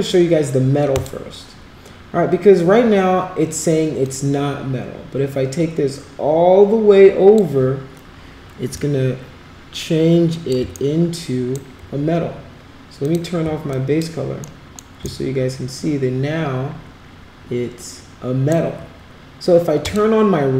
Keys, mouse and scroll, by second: 1.0 click, 4.1-7.4 drag, 8.8-10.5 alt+drag, 10.9 shift+right click, 13.1 click, 13.7 alt+click, 14.4 alt+middle click, 15.1-18.5 shift+right drag, 19.9 click.